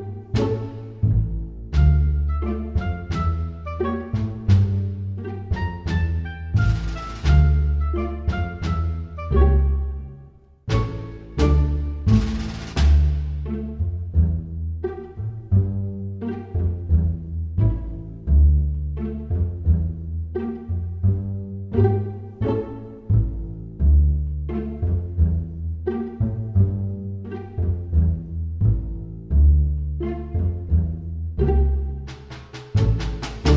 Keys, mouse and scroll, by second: 6.4 scroll down 1, 7.4 click, 7.4-9.6 scroll down 2, 11.1 click, 13.2 click, 17.6 middle click, 18.7 click, 19.6 click, 20.4 middle click, 31.0 middle click, 32.6 click, 33.2 click.